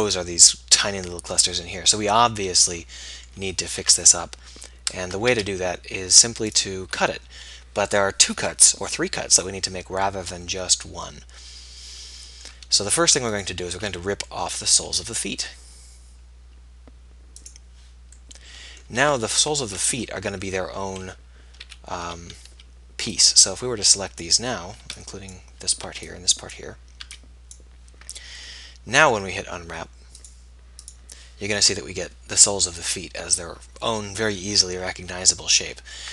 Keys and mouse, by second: 4.0 Tab, 5.2 Tab, 5.4 z, 13.6-15.2 right drag, 19.3-21.3 middle drag, 21.3 KP_1, 21.9 a, 22.5 z, 22.9 b, 25.0 b, 26.1 b, 27.2 b, 35.2 KP_1.